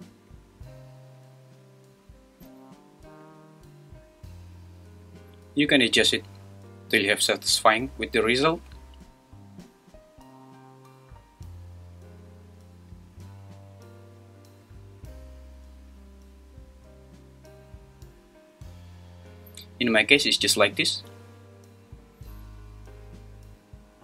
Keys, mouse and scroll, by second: 0.3-2.4 drag, 3.2-5.1 drag, 5.8-7.3 drag, 12.9-14.7 drag.